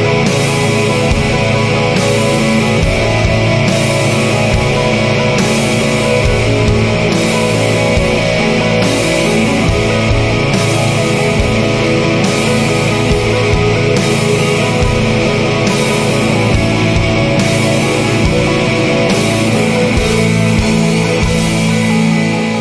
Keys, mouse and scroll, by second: 0.6 click, 1.8-3.4 drag, 4.2 click, 5.0-6.5 drag, 7.0 click, 7.6 click, 7.9 right click, 11.6 click, 13.3 click, 14.9 click, 15.9 click, 16.3 click, 16.9-18.6 drag, 18.6 0, 19.2-19.7 scroll down 1, 19.9 scroll up 1, 21.0 click, 21.4 click.